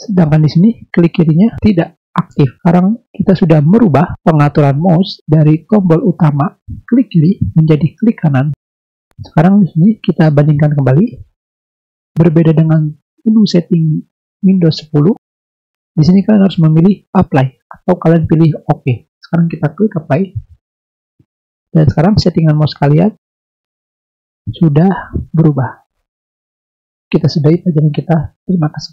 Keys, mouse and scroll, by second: 2.5 click, 3.2 click, 10.7 click, 20.1 click, 22.4 click, 23.3 click, 24.0 click, 25.6 drag, 26.2 click.